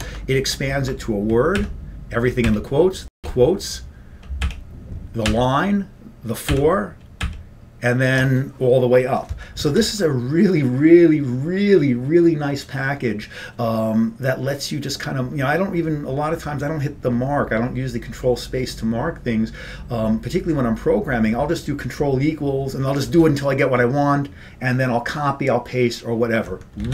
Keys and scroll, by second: 3.4 ctrl+=, 8.6 ctrl+=.